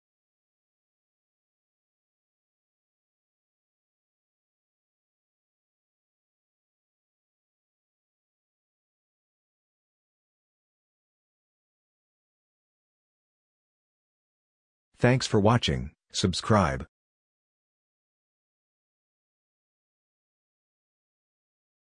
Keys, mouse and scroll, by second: 1.6-2.4 scroll down 1.